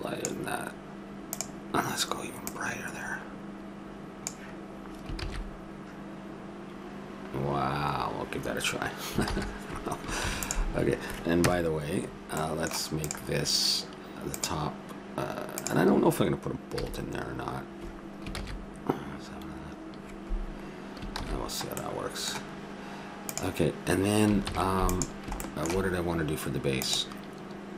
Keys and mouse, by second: 1.3-3.0 drag, 5.5 shift+z, 9.3 shift+z, 10.3 ctrl+s, 11.4 KP_0, 13.1-15.7 drag, 16.8 a, 18.3-19.4 middle drag, 18.3 shift+z, 21.3 shift+z, 24.5 ctrl+s.